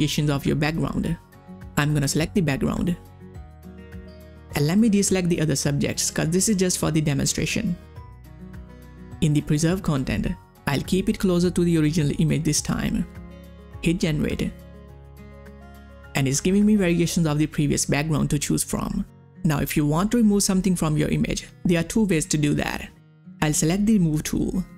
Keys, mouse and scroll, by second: 0.0 click, 4.8 click, 4.9-9.4 drag, 14.1 click, 14.1 click, 16.1 click, 16.2 click, 19.9 click, 19.9 click.